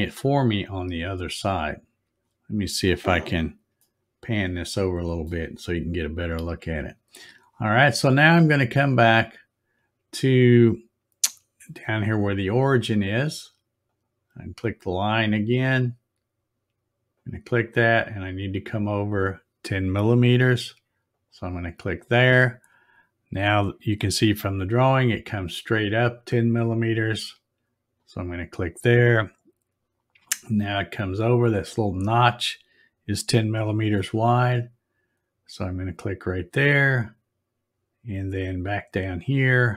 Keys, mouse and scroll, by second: 0.9-1.2 scroll down 2, 1.4 scroll up 1, 3.8 shift+middle click, 4.1 shift+middle click, 9.2 click, 13.9 click, 17.1 click, 21.1 click, 27.9 click, 35.9 click.